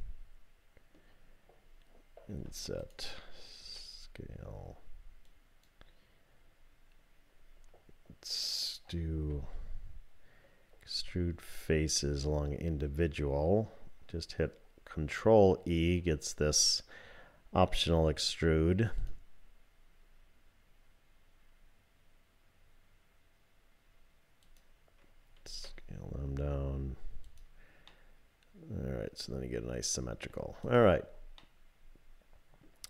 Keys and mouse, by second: 2.3 i, 3.6 s, 9.3 alt+e, 25.5 s, 27.9-30.3 middle drag, 30.6 click, 31.4-32.7 middle drag.